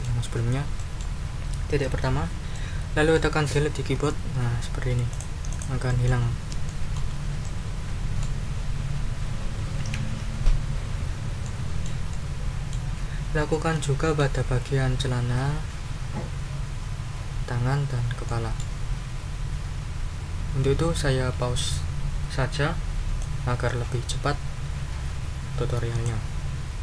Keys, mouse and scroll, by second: 0.3 ctrl+scroll down 2, 0.8 ctrl+click, 2.5 click, 3.9 Delete, 5.1 click, 6.2 ctrl+scroll down 2, 11.4 middle click, 12.1 middle click, 12.7 ctrl+scroll up 1, 18.3-18.8 scroll up 3, 23.2-26.0 scroll up 2, 26.0-26.8 scroll up 1.